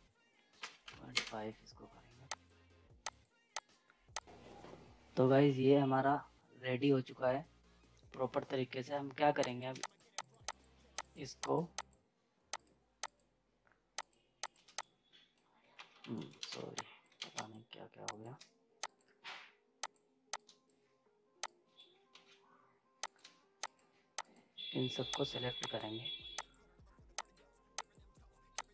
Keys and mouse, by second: 2.3 click, 4.2 ctrl+space, 9.4 ctrl+space, 9.6 click, 15.7 ctrl+z, 16.1 right click, 16.4 ctrl+space, 16.5 z, 16.8 click, 17.2 ctrl+space, 17.3 click, 18.8 shift+click, 22.1 ctrl+z, 23.0 click, 23.6-28.7 drag.